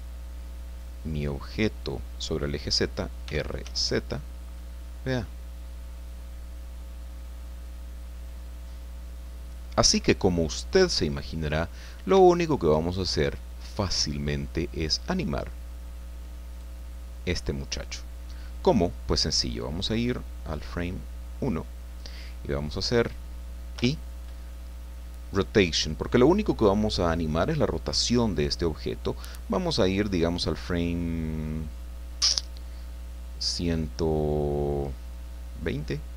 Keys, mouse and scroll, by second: 1.3-1.6 scroll down 1, 3.2 r, 3.6 z, 9.9 Escape, 10.9 middle click, 11.8-12.2 scroll up 3, 12.3-14.2 shift+middle drag, 16.5 right click, 20.7 click, 22.8 right click, 23.7 i, 25.3 click.